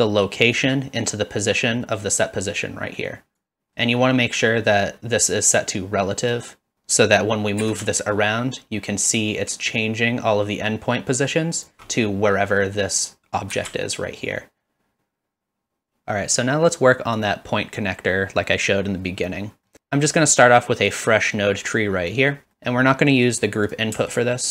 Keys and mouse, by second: 0.6-3.4 drag, 3.7 middle click, 6.2 click, 7.6 g, 11.6 ctrl+click, 17.2 click, 19.7 middle click, 24.1-24.5 alt+drag.